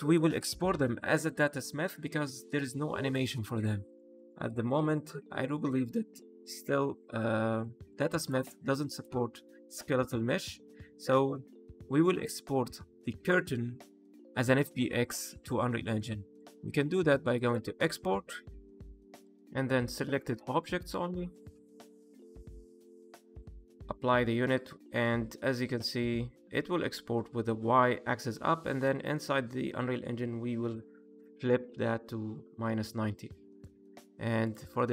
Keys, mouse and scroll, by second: 3.0 click, 3.5 middle click, 4.1 click, 4.7 KP_Divide, 5.6 middle click, 6.7 alt+h, 7.5 middle click, 8.1 click, 8.8 click, 9.3 middle click, 16.3 click.